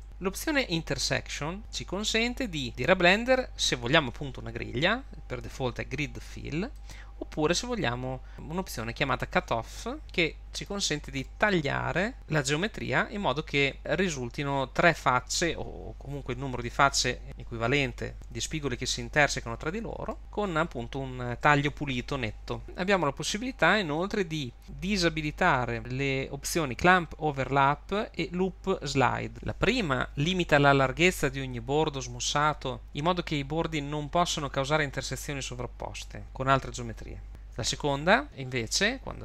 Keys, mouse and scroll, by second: 0.0-1.0 scroll down 10, 6.8 click, 10.0 middle click, 10.9-11.2 scroll down 3, 11.2 shift+middle click, 12.1-20.1 scroll up 1, 20.1 middle click, 22.6 click.